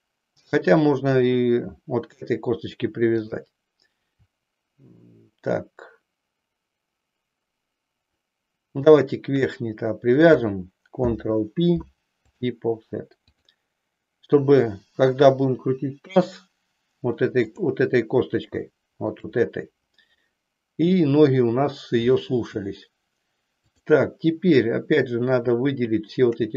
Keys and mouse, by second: 1.3 click, 11.0 ctrl+p, 13.2 click, 18.7 shift+middle click, 25.1-26.3 shift+drag.